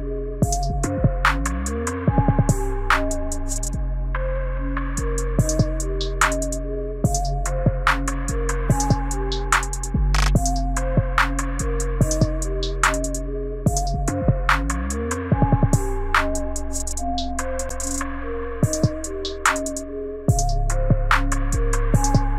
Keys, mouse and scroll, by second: 0.5 shift+middle click, 1.4 click, 2.8 space, 3.1 click, 5.2 g, 7.5 space, 12.5 g, 19.2 click.